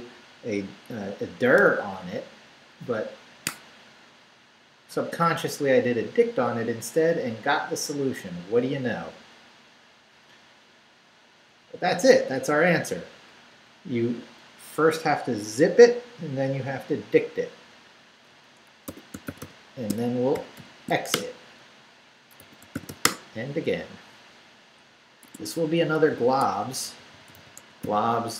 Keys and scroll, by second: 11.6 Down, 18.7-21.0 typing, 21.1 shift+Return, 21.9 Return, 22.1-23.4 typing, 25.2 Tab, 26.1-28.3 typing, 26.3 Tab.